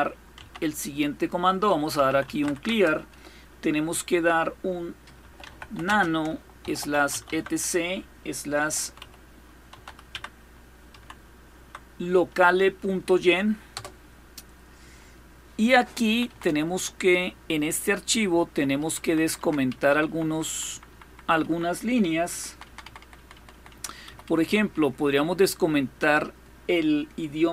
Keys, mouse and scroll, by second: 0.0 c, 1.3-2.5 typing, 4.5-11.2 typing, 13.4 typing, 15.7-18.2 typing, 18.5 Down, 18.7 Down, 18.8 Down, 19.0 Down, 19.3 Up, 19.5 Up, 19.7 Up, 19.9 Up, 20.1 Up, 20.3 Up, 20.5 Up, 20.7 Up, 20.9 Up, 21.1 Up, 21.9-25.6 typing, 23.2 Down, 23.3 Down.